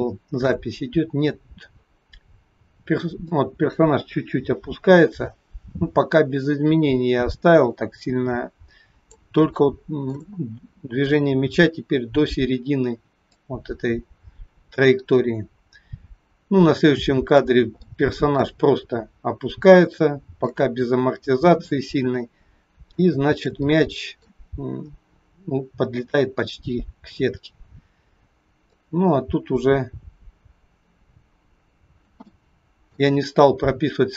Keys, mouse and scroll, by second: 0.9-2.6 scroll up 1, 3.3 click, 9.7 shift+middle click, 13.4 click, 17.8 shift+middle click, 17.8 shift+scroll up 1, 23.7 middle click, 28.8 click, 32.4 shift+middle click.